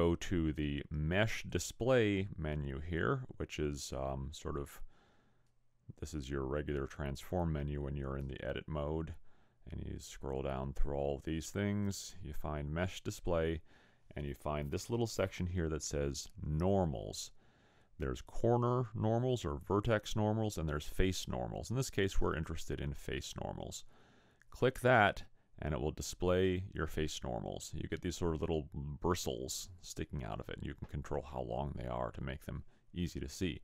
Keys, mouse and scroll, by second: 3.8 click, 24.9 click.